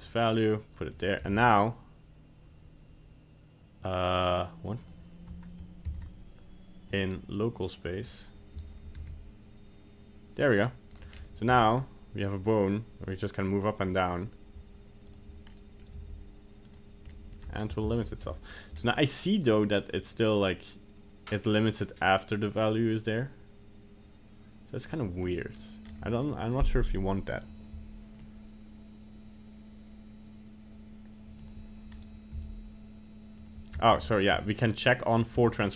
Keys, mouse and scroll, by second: 0.9 right click, 1.2 g, 6.1 ctrl+z, 6.9 click, 9.0 g, 11.1-12.8 scroll down 2, 11.6 g, 15.6 middle click, 16.0 g, 17.1 middle click, 18.0 ctrl+z, 18.4 middle click, 18.8 scroll up 1, 20.1 click, 25.3 middle click, 25.8-27.3 scroll up 1, 27.3-27.9 scroll up 1, 31.5 click, 32.3 g, 34.0 g, 35.4 shift+middle click, 35.6 shift+middle click, 35.7 scroll down 2.